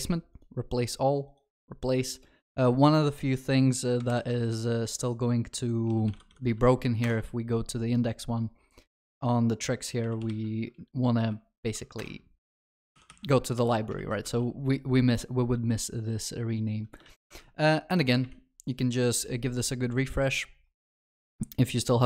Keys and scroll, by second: 4.2 ctrl+shift+n, 12.0 Return, 13.0 ctrl+Delete, 13.7 ctrl+s, 14.0 ctrl+alt+shift+l, 14.3 ctrl+s.